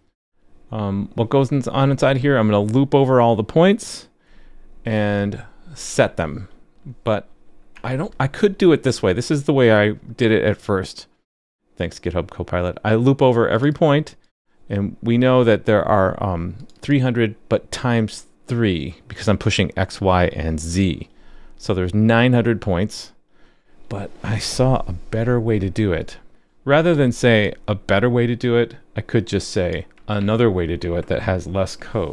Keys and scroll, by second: 25.2 super+c, 30.2 super+v.